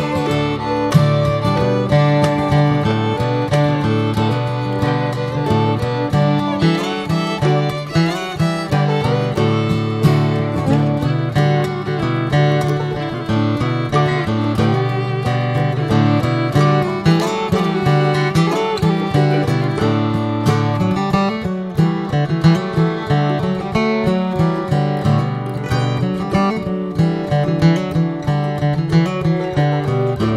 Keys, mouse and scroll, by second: 0.0 click, 0.3 scroll down 1, 1.7-5.5 drag, 5.5 scroll up 2, 5.9-8.5 middle drag, 8.5 scroll up 1, 8.8-11.4 middle drag, 11.4-11.7 drag, 11.7-12.7 middle drag, 12.7-14.7 drag, 15.1-15.8 middle drag, 15.8 drag, 16.0 scroll down 1, 16.2-18.3 middle drag, 18.3 click, 18.6 scroll up 1, 18.8 middle click, 19.8-21.2 drag, 21.2 ctrl+z, 21.5-22.0 middle drag, 22.0-22.7 scroll up 1, 22.7-25.4 drag, 25.8 drag, 26.1-26.5 middle drag, 26.5 click, 28.0-29.3 drag.